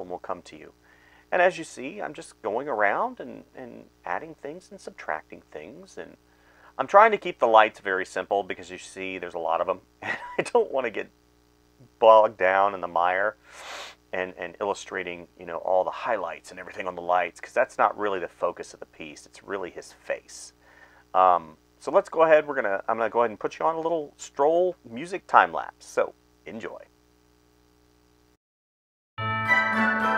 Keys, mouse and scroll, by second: 0.0-0.7 typing, 2.0-10.3 typing, 11.5-12.9 typing, 15.4-18.6 typing, 20.6 space, 21.1 space, 21.6 space, 22.1 space, 23.4 space, 24.4 space, 24.5 right click, 25.1 space, 26.4 space, 27.3 space, 29.7 space.